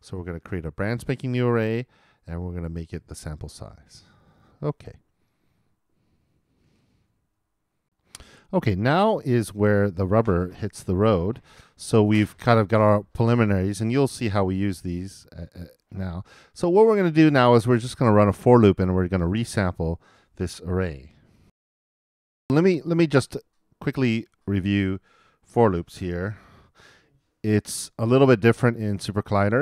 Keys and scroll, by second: 21.5 alt+i, 25.5 super+n, 26.2 shift+super+n, 26.7 shift+super+=.